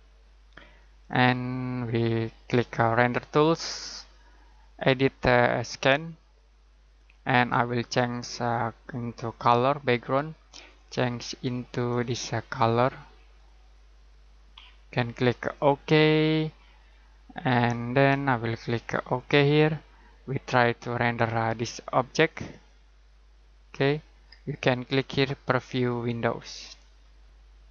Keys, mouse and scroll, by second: 3.0 click, 5.7 click, 19.1 click, 22.5 middle click, 25.7 click.